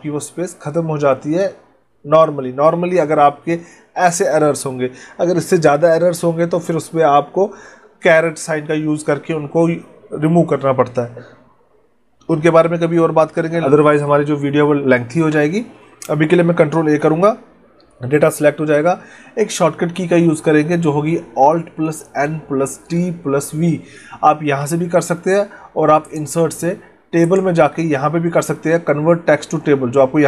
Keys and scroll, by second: 16.7 ctrl+a.